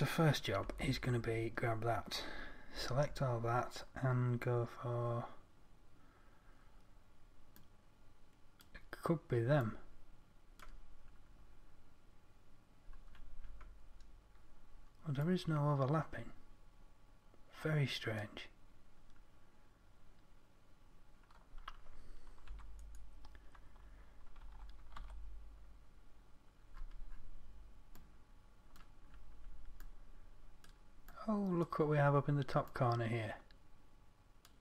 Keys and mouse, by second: 1.1 Tab, 3.1 a, 22.9 Tab, 24.9 Tab, 25.4 a.